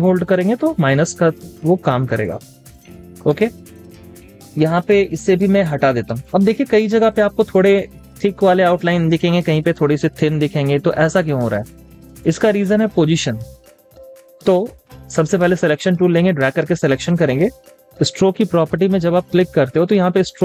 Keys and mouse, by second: 0.3 alt+click, 2.2 alt+click, 3.3 space, 5.1 alt+click, 6.0 z, 11.6 z, 11.7 double click, 12.1 space, 12.7 space, 12.9 double click.